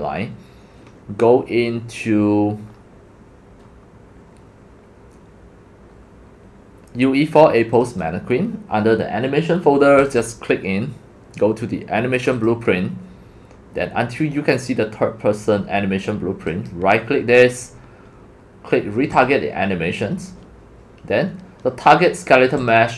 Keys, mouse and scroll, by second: 1.1 middle click, 1.2 middle click, 1.7 middle click, 1.8 middle click, 2.3-3.0 scroll, 3.6 scroll, 5.0-5.4 scroll down 7, 5.9-6.4 scroll, 6.8 drag, 7.8 click, 7.9 click, 10.0 click, 10.2 click, 12.2 click, 12.4 click, 13.5 scroll, 16.7 click, 22.6 click.